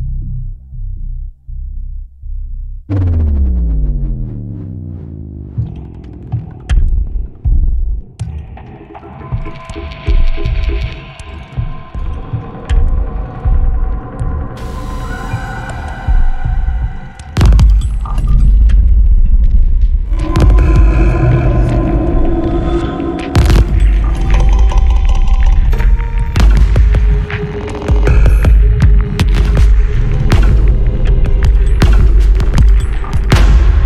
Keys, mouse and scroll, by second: 0.4 click, 1.8-3.0 drag, 3.8 click, 5.4 click, 7.2 click, 9.0 2, 9.3 9, 10.1 click, 12.0 click, 13.7-15.4 drag, 16.2 click, 17.1 click, 18.1 click, 19.8 scroll up 2, 21.3 right click, 21.8 click, 22.6-26.1 drag, 26.7 click, 27.8 click, 29.8 click, 32.4 1, 32.6 5, 33.5 click.